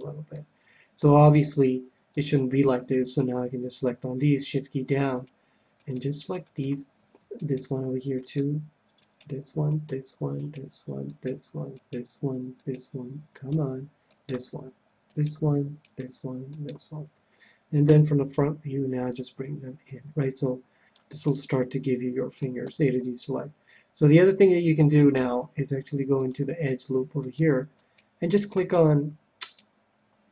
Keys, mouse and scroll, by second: 0.3-1.9 middle drag, 2.1-3.8 drag, 3.1-6.2 right drag, 7.4-17.9 right drag, 17.8 KP_1, 19.1-21.0 drag, 21.2 middle click, 21.7-22.8 middle drag, 22.4 a, 23.3 a, 24.8-26.7 right drag, 26.1-27.9 drag, 26.6 middle click, 27.8 middle click, 27.8-30.3 right drag.